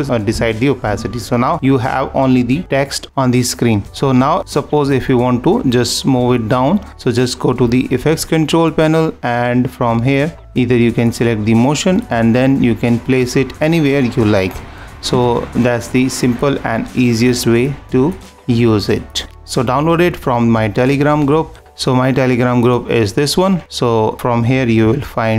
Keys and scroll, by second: 0.8 super+-, 15.1 super+-, 25.3 =.